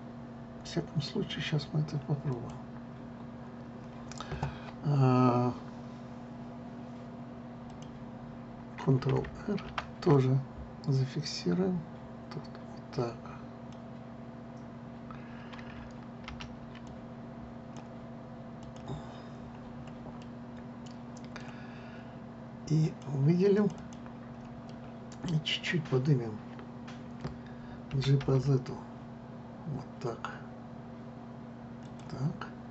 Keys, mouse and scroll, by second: 2.9 click, 8.3 click, 10.4 ctrl+r, 14.3 click, 16.9 ctrl+z, 17.5 click, 19.3 click, 20.1-20.9 scroll up 4, 20.9-23.5 middle drag, 23.5 click, 24.2 click, 24.4 click, 25.4-28.4 middle drag, 28.6 g.